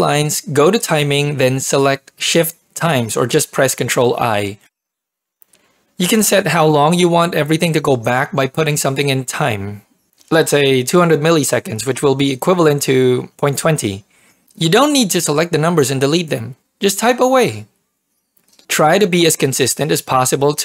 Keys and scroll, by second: 10.6-12.3 typing, 16.6-19.0 typing.